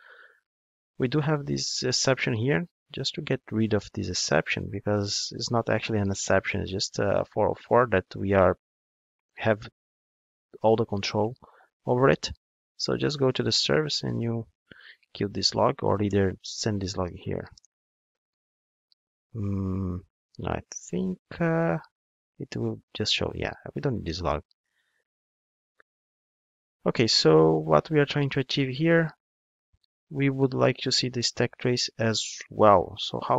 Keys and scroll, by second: 14.7 super+x, 16.2 super+v, 29.4 ctrl+Tab.